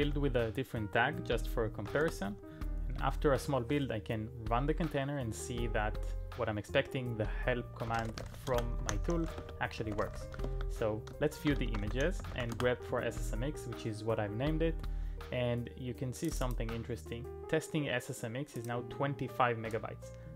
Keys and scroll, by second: 1.8-4.2 typing, 7.7-12.9 typing.